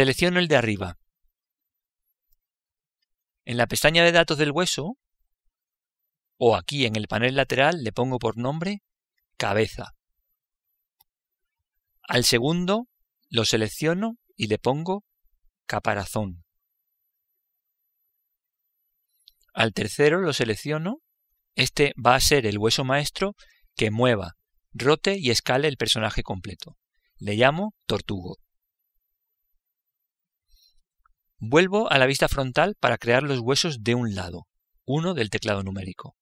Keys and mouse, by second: 0.8 right click, 6.2-9.3 drag, 13.6 right click, 14.9 click, 20.7 right click, 22.1 click, 32.9 KP_1.